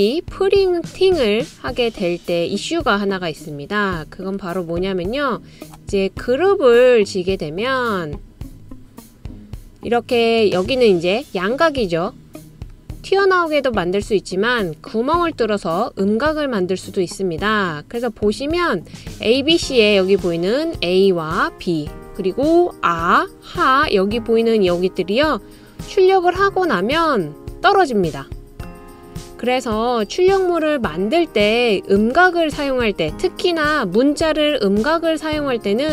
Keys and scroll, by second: 2.6-3.3 typing, 6.1-6.8 typing, 9.2-10.1 typing, 15.6-18.6 typing, 20.1-20.8 typing.